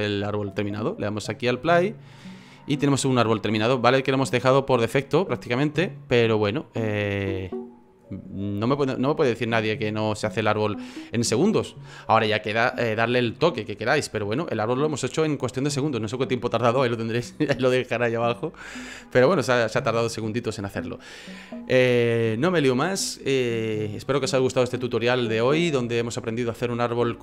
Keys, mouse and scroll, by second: 1.3 click, 3.4 click, 5.1 click, 5.1 middle click, 6.6 click, 7.1 right click, 7.5 middle click, 8.0 scroll up 2, 10.0 middle click.